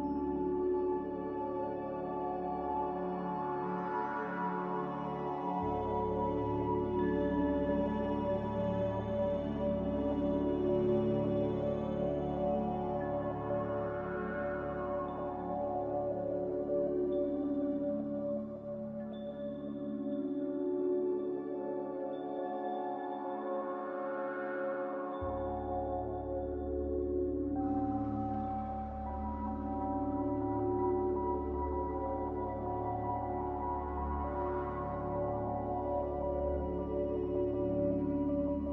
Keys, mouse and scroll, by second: 1.0 a, 2.9 \, 3.7 z, 5.3-6.6 typing, 7.7-8.4 typing, 11.5 x, 13.3 z, 14.4-15.2 typing, 17.0 x, 20.3 f, 21.2 a, 33.5 n.